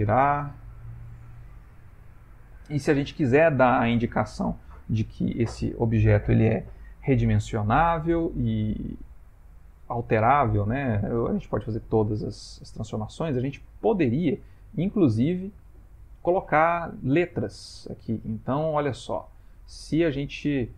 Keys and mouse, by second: 0.1 r, 13.2 middle click, 14.6 shift+middle click, 15.8 middle click, 17.5 middle click, 18.3 ctrl+middle click, 18.4 ctrl+middle click, 18.7 ctrl+middle click, 19.0 shift+middle click, 19.2 shift+middle click, 19.5 ctrl+middle click, 20.2 ctrl+middle click, 20.3 ctrl+middle click.